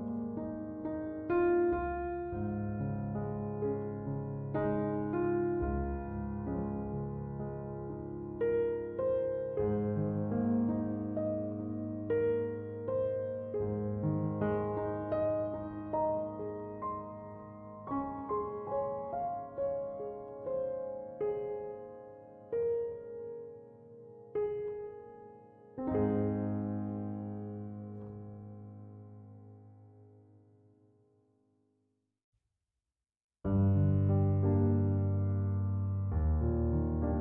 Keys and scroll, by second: 19.0 c, 19.2 o, 19.5 m, 32.2 ., 32.4 5, 32.7 Return.